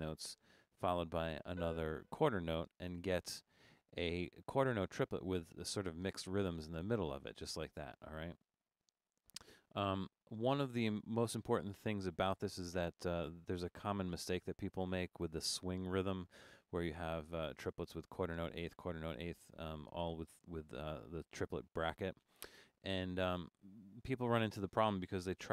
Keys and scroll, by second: 0.4 Up, 4.3-5.0 typing, 8.6 Escape, 9.9 BackSpace.